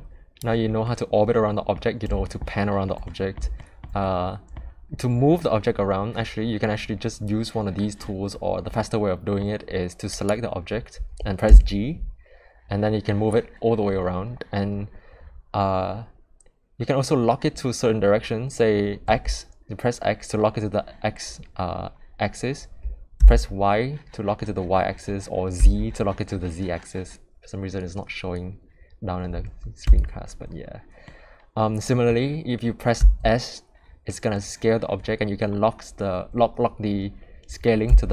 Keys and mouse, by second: 0.9 middle click, 2.3-2.9 shift+middle drag, 3.1-3.4 middle drag, 3.6 shift+middle drag, 4.0-4.5 middle drag, 8.8 middle click, 10.2 click, 11.5 g, 31.1-32.1 middle drag, 33.0 s.